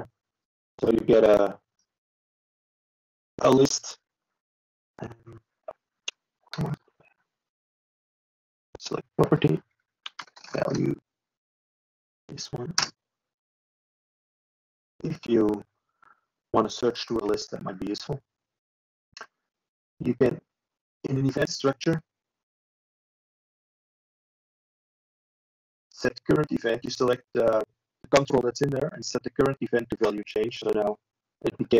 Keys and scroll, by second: 15.4 ctrl+e.